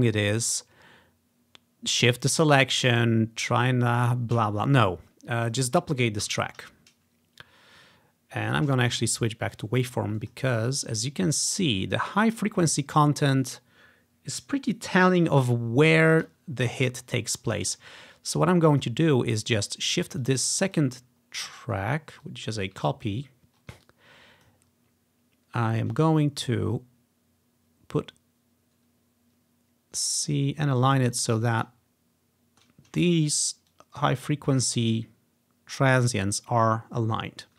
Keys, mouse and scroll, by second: 3.8 scroll down 1, 4.6-5.4 scroll down 1, 5.5 click, 6.3 ctrl+d, 6.5 click, 8.6-10.1 drag, 10.3 click, 11.0-15.3 ctrl+scroll up 1, 16.1 ctrl+scroll down 1, 17.0 scroll down 2, 18.2 ctrl+scroll down 2, 18.8 click, 19.4 click, 20.3 click, 21.1-21.7 scroll up 2, 22.3 click, 23.2-23.5 scroll up 4, 23.9 click, 24.7-25.3 scroll up 2, 25.6 scroll up 2, 31.2 click, 31.9-32.7 ctrl+scroll down 2, 33.1-33.5 ctrl+scroll up 2, 33.8 click, 36.6-37.2 scroll down 2.